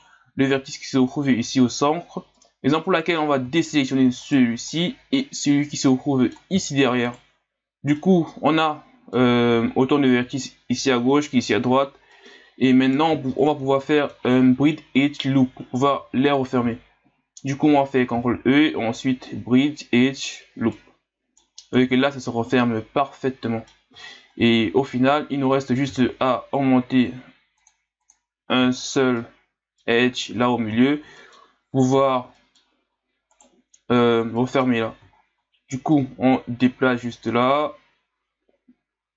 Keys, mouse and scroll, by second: 2.4-4.2 middle drag, 4.2 shift+right click, 4.8-7.1 middle drag, 7.1 shift+right click, 7.7 scroll down 1, 7.9-11.0 middle drag, 12.1-13.3 middle drag, 13.3 scroll up 3, 13.8-16.8 middle drag, 18.1 ctrl+e, 20.7 middle click, 21.7-22.5 scroll down 4, 22.5-24.0 middle drag, 24.0-25.9 scroll up 4, 25.9 ctrl+r, 28.7-29.2 scroll up 1, 29.2-30.4 middle drag, 30.4-31.0 scroll up 5, 31.2 middle click, 31.6-32.2 scroll up 2, 32.4 middle click, 32.8-33.3 scroll up 1, 33.3 right click, 34.4 middle click, 35.1 scroll up 3, 35.9-38.9 drag.